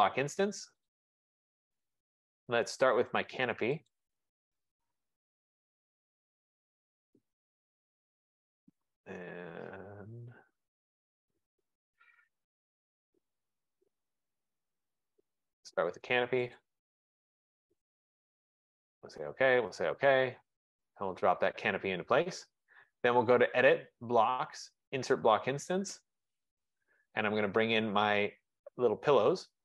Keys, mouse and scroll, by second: 1.0 click, 4.0 click, 7.6 click, 11.2 click, 12.5 click, 12.7 click, 14.3 click, 14.5 click, 15.2 click, 16.6 click, 18.9 click, 19.8 click, 21.6 click, 23.7 click, 26.0 click, 28.3 F15.